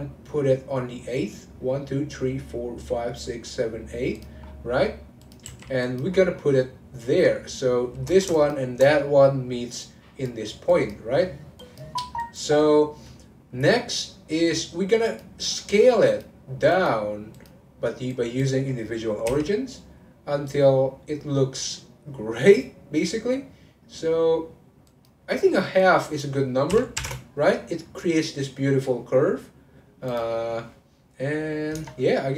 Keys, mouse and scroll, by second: 4.4-5.2 scroll down 10, 5.2 click, 5.4 g, 6.1-8.3 scroll up 10, 8.3 shift+click, 9.8 click, 10.7 click, 12.2 click, 15.0-16.2 drag, 16.7 click, 17.3-19.2 drag, 19.2 s, 25.7-28.8 drag, 29.6-30.0 scroll up 1, 30.1 click, 32.0 click.